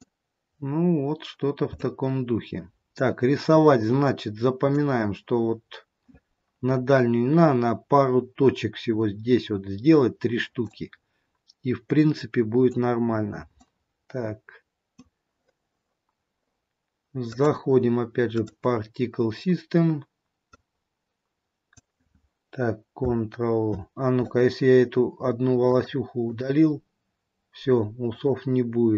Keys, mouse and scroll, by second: 1.2-1.9 scroll down 1, 1.9 middle click, 1.9 scroll down 1, 3.6-3.9 scroll up 3, 4.2 middle click, 10.7 middle click, 13.3-13.8 scroll down 2, 13.8 middle click, 17.2 click, 20.7 click, 25.6 click, 28.0 click.